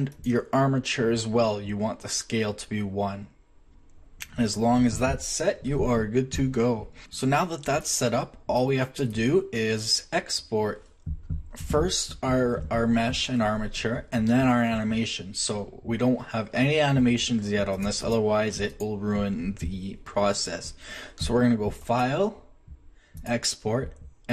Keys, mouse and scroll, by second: 0.1-1.9 right drag, 6.4 middle click, 7.4 middle drag, 8.6-11.7 middle drag, 17.7 click, 19.8-20.7 drag, 21.8-24.3 drag.